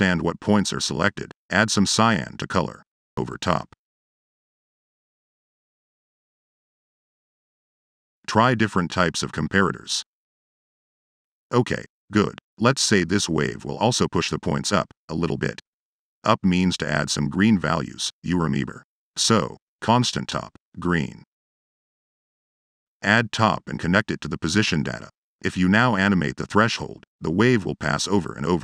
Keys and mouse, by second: 0.3 click, 0.9 click, 1.4 click, 2.2-3.5 typing, 3.4 click, 3.9-4.2 drag, 4.8 click, 5.7 click, 6.3 click, 7.0 click, 8.0 click, 9.0 click, 9.4 click, 10.1 click, 10.8 click, 11.6 drag, 12.0 drag, 12.4 click, 13.1 click, 13.4 click, 14.7 click, 15.8 click, 16.0 c, 16.3 o, 17.9 click, 18.2 click, 18.7 click, 19.3 drag, 19.4 0, 20.2 click, 20.8 click, 20.8 1, 21.9 click, 22.6 click, 22.9 a, 24.0-24.4 drag, 24.7 drag, 25.1-25.5 drag.